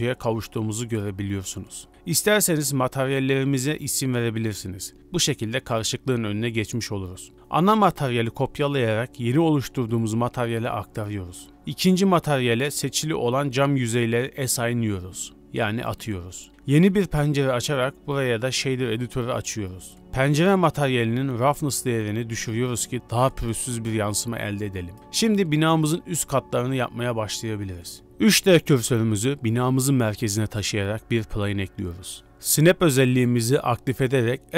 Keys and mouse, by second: 0.3 click, 1.3 click, 1.9 ctrl+space, 3.6-7.3 drag, 6.6 BackSpace, 7.4-8.1 drag, 8.6 click, 9.4 click, 10.6-11.3 drag, 11.7 click, 12.3 middle click, 12.7 z, 13.2 shift+click, 14.6-15.3 drag, 15.7 click, 16.1 Tab, 16.5 click, 18.0 click, 19.3 click, 19.7 n, 20.4 click, 21.2-22.4 drag, 23.0-23.8 middle drag, 24.2 shift+middle drag, 24.4-25.2 middle drag, 26.2-27.7 drag, 28.1 shift+middle drag, 28.8 shift+s, 30.9 shift+a, 33.0 KP_7, 33.0 s, 33.4-34.5 drag.